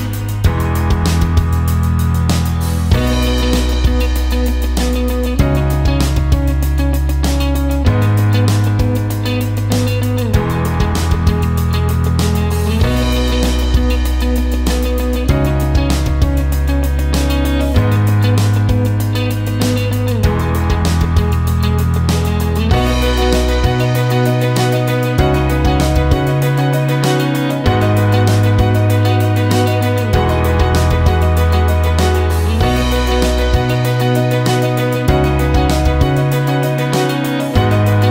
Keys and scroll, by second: 1.2 Return, 6.5 7, 6.6 Return, 15.0 ctrl+shift+g, 24.2 ctrl+shift+z, 31.3 space, 35.6 ctrl+space.